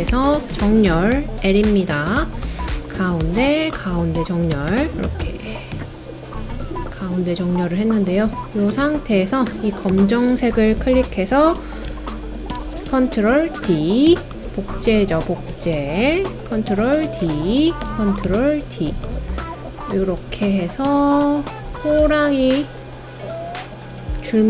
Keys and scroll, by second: 0.1 l, 12.5 super+d, 16.5 super+d, 17.2 super+d.